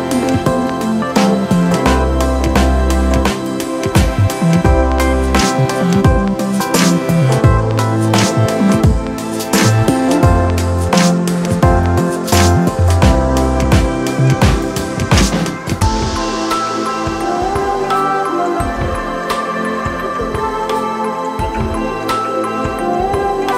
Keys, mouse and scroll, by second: 7.2 ctrl+d, 15.4 ctrl+t, 16.4 alt+shift+click, 22.7 ctrl+click.